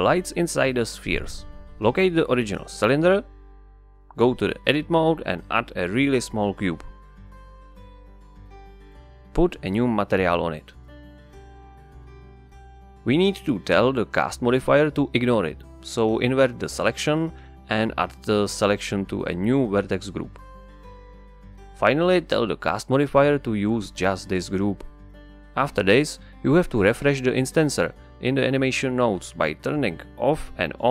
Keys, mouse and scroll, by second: 2.9 click, 4.2 KP_Divide, 5.1 Tab, 6.0 z, 6.9 shift+a, 8.1 middle click, 8.5 s, 9.9 click, 11.4-13.4 drag, 13.4 Return, 15.2-17.1 drag, 17.1 ctrl+i, 21.2-29.6 drag, 29.6 Tab, 30.1 KP_Divide.